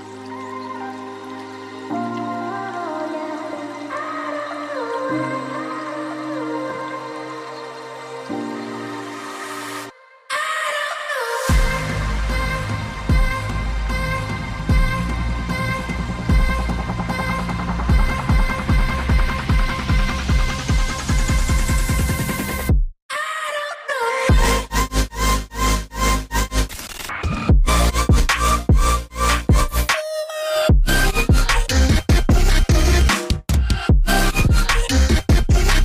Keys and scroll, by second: 31.4 typing, 31.6 Return.